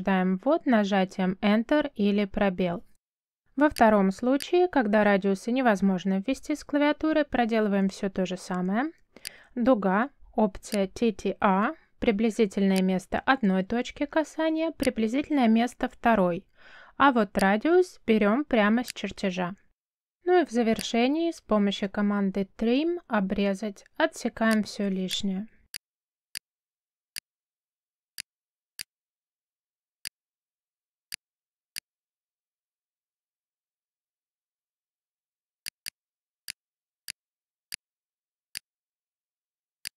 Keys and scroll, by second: 0.3 3, 1.6 Return, 7.5 c, 8.2 space, 22.9 t, 23.9 space, 26.9 space, 30.7 space, 33.2 t, 34.4 space, 38.0 space.